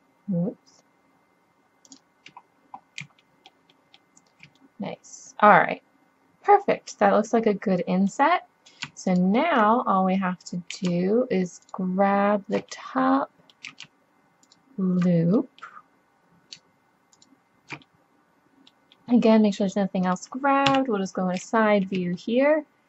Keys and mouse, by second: 2.5 middle click, 3.9 middle click, 4.7 middle click, 5.2 middle click, 6.7-8.3 middle drag, 9.1-10.9 drag, 10.9 middle click, 11.7-13.5 drag, 13.5-14.8 middle drag, 14.8 right click, 15.4 middle click, 15.7 middle click, 17.2-19.2 drag, 20.2 middle click, 20.7 KP_3.